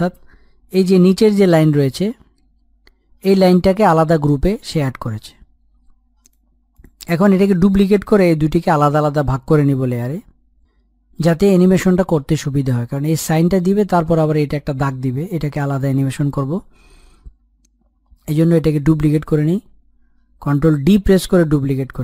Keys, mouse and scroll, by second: 0.2 click, 6.0 click, 19.4 ctrl+Num_Lock, 20.5 ctrl+d.